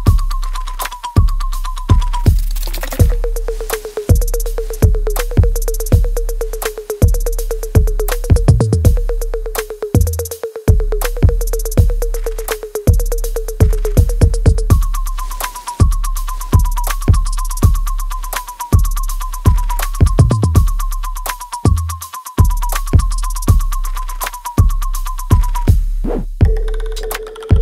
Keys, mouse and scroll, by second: 1.2 alt+right click, 1.6 alt+click, 2.0-3.5 alt+middle drag, 3.5 shift+click, 4.0 alt+click, 4.6-6.0 alt+middle drag, 6.0 g, 6.7 alt+click, 7.2 alt+right click, 7.7-9.2 alt+drag, 9.2 alt+right click, 9.6-11.4 alt+drag, 11.4 alt+middle click, 11.7-13.1 alt+right drag, 13.1 ctrl+b, 14.5 click, 15.7-18.9 ctrl+drag, 18.9 alt+right click, 19.4 alt+click, 19.9-21.4 alt+right drag, 21.4 right click, 21.9 click, 22.2 alt+right click, 22.6-24.7 alt+drag, 24.7 alt+right click, 25.1 alt+click, 25.5 alt+middle click, 25.9 alt+right click, 26.3 alt+click, 26.6 right click, 27.5 click.